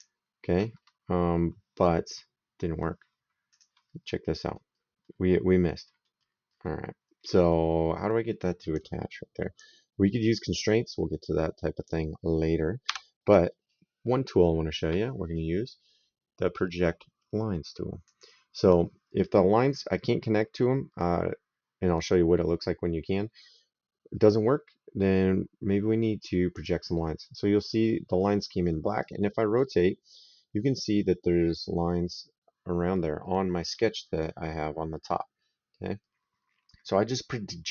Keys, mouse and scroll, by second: 3.3 click, 8.5 click, 10.4 click, 12.7 Delete, 17.9 click, 26.3 click, 28.8 right click, 33.5 right click.